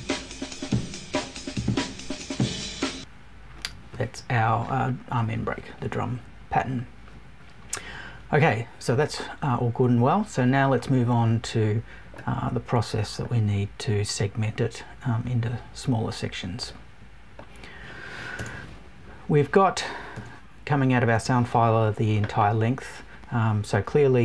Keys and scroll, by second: 18.3 BackSpace, 20.1 BackSpace.